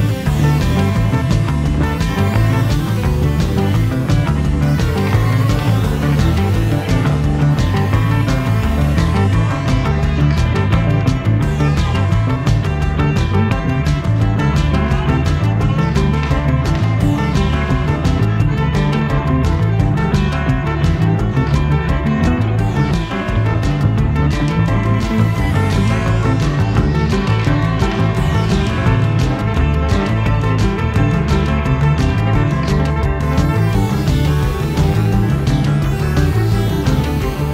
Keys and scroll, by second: 11.1 ctrl+z, 19.2 Escape, 20.6 Escape, 27.3 Escape.